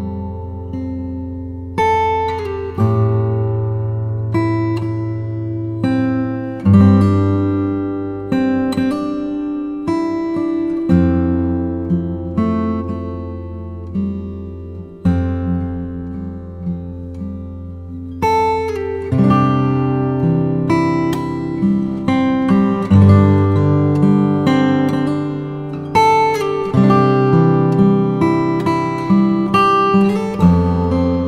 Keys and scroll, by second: 0.2 [, 2.1 0, 4.2 5, 4.6 ], 5.2 ], 7.6 v, 9.2 z, 10.8 v, 13.0 super+Tab, 20.3 alt+shift+Return, 20.8 shift+Return, 21.3 z, 22.7 space, 24.4 v, 27.7 super+t, 28.2 shift+super+t, 30.2 shift+Return, 30.8 Return.